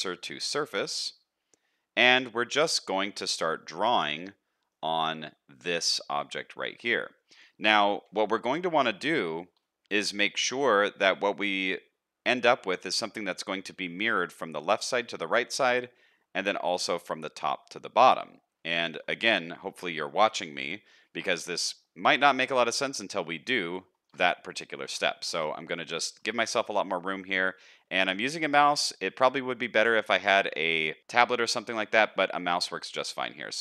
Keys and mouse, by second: 3.6 shift+middle click, 4.2 middle click, 6.3 shift+middle click, 7.0 middle click, 8.1 KP_1, 9.7 shift+middle click, 13.3 shift+middle click, 16.7 shift+middle click, 18.7 shift+middle click, 19.1 middle click, 20.2 KP_1, 21.1 shift+middle click, 24.0 shift+middle click, 24.9 n, 25.4 shift+middle click.